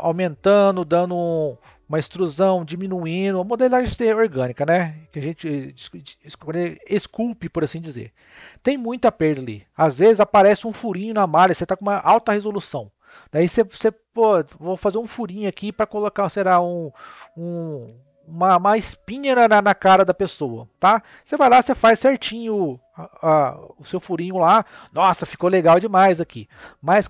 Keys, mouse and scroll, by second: 11.6-12.0 scroll up 2, 12.2 scroll up 2, 21.1 click.